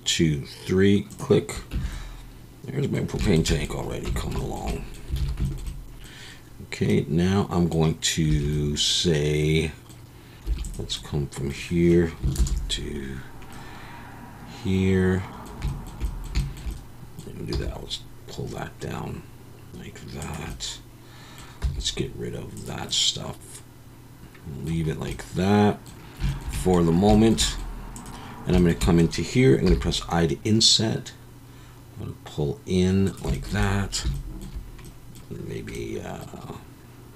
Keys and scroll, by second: 1.7 Tab, 4.1 Tab, 5.2 alt+a, 8.3 2, 10.5 3, 12.3 ctrl+KP_Add, 17.5 e, 21.6 x.